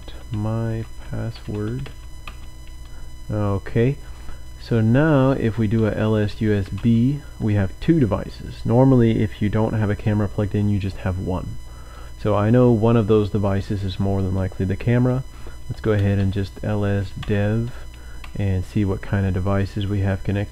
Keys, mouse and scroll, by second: 0.0-2.2 typing, 5.6-7.1 typing, 15.6-18.2 typing, 18.2 Return.